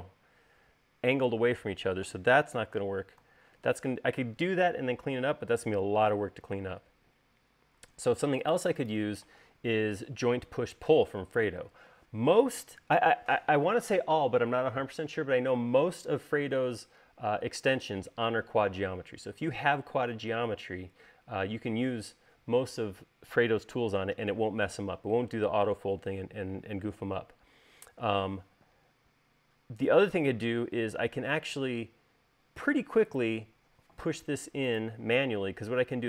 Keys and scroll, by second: 3.2 super+z, 8.5 space.